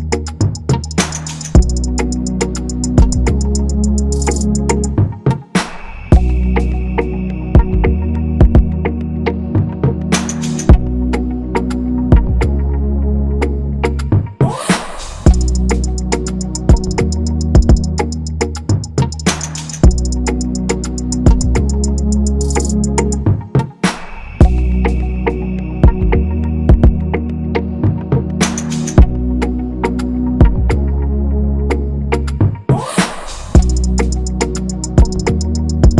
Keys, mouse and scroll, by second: 6.9 shift+Up, 11.7 ctrl+-, 17.6-19.4 scroll up 1, 26.3 ctrl+=, 27.6 shift+click, 28.1 shift+Up, 32.2 shift+click, 34.3 Left, 34.7 Left, 34.9 Left, 35.1 shift+Down, 35.6 Up, 35.8 Up.